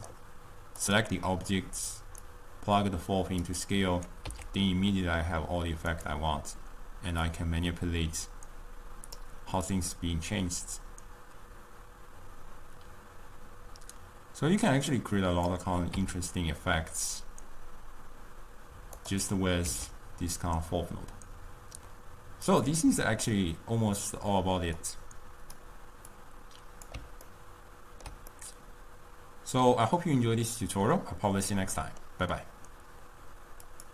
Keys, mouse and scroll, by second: 2.6-4.4 drag, 4.4 s, 7.3-12.8 drag, 16.0 s, 17.5 scroll up 1, 19.7 s, 23.5-25.0 middle drag, 25.0-26.4 drag, 27.4-31.8 ctrl+middle drag.